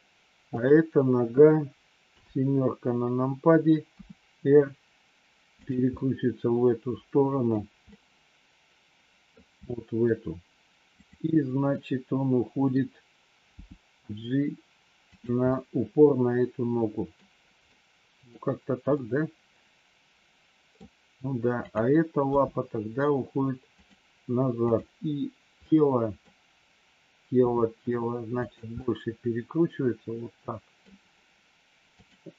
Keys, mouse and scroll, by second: 2.1 KP_7, 3.8 r, 6.0-7.5 middle drag, 7.8-9.2 middle drag, 9.6 middle click, 11.7-12.7 middle drag, 13.5 g, 15.5-17.2 middle drag, 17.6 middle click, 18.8 scroll up 1, 19.0-20.8 middle drag, 21.5 click, 22.3 g, 24.6 click, 25.6 middle click, 27.5 r, 28.8 middle click, 29.7-30.8 middle drag, 32.0 click.